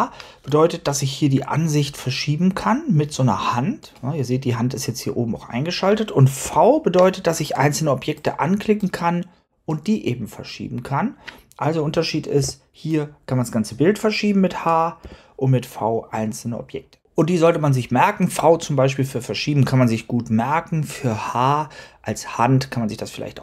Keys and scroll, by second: 6.3 v, 12.3 h, 14.9 v.